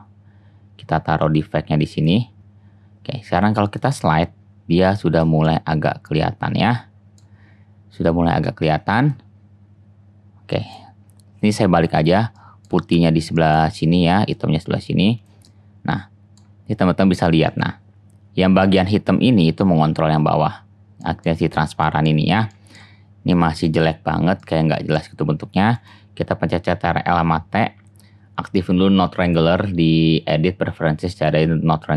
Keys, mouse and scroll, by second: 3.4-5.1 drag, 6.2 click, 9.5-10.2 drag, 10.7-14.2 drag, 23.3 click, 24.5-25.8 middle drag, 25.8 click, 27.5 ctrl+t.